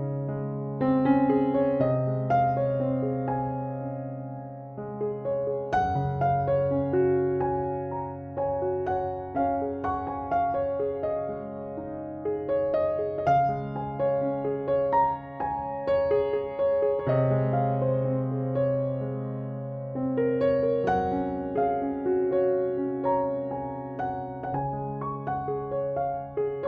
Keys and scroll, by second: 12.4 space.